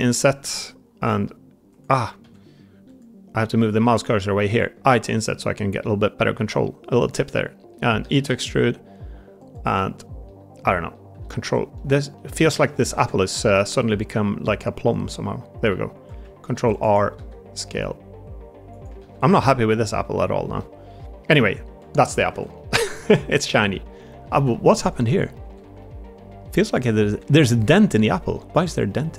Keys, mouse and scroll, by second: 2.1 ctrl+z, 4.6 i, 7.2 middle click, 7.9 e, 9.3 click, 9.7 middle click, 10.6 middle click, 10.6 click, 10.8 middle click, 11.6 middle click, 12.0 middle click, 12.7 ctrl+KP_Add, 13.5 ctrl+KP_Add, 13.5 middle click, 16.4 ctrl+r, 17.1 s, 18.9 ctrl+z, 19.2 middle click, 20.5 middle click, 21.9 middle click, 22.2 Tab, 22.4 middle drag, 22.9 shift+middle drag, 23.2 middle click, 23.9 middle click, 24.2 ctrl+z, 24.9 middle click, 25.3 Tab, 25.7 middle click, 26.7 click, 27.0 Tab, 27.1-29.1 middle drag.